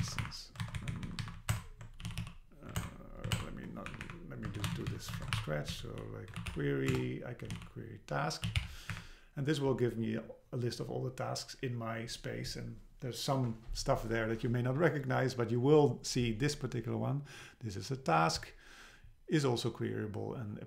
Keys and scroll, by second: 0.1 shift+Down, 0.2 Delete, 0.6 super+Right, 0.8 Left, 1.3 Right, 1.5 alt+BackSpace, 3.9 Up, 4.6 super+Left, 4.8 shift+Down, 5.2 shift+super+Right, 5.4 Delete, 6.3 BackSpace, 6.9 Return, 8.9 Up.